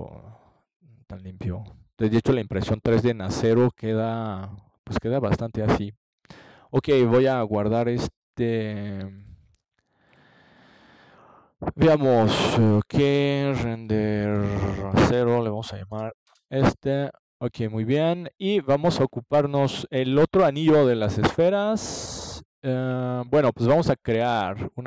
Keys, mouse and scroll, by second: 5.7 ctrl+alt+KP_0, 8.1 g, 11.8-13.7 drag, 17.5 click, 19.0-20.9 drag, 21.2 right click, 24.4 click.